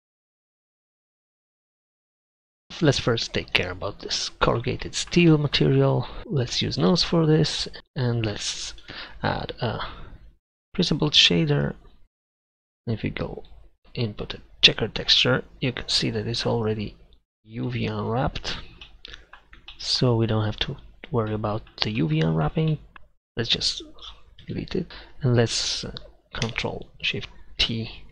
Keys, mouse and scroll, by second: 0.1 right click, 0.4 click, 0.7 Tab, 7.0-11.6 drag, 8.4 Delete, 9.0 shift+a, 13.5-15.5 drag, 17.4-18.3 drag, 19.9-20.3 middle drag, 24.5 b, 24.9 Delete.